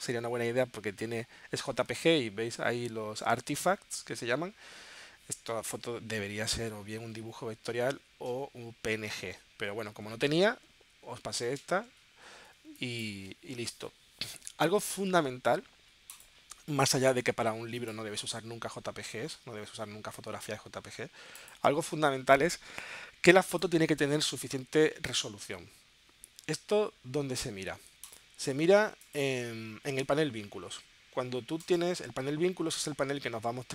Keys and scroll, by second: 12.6 space.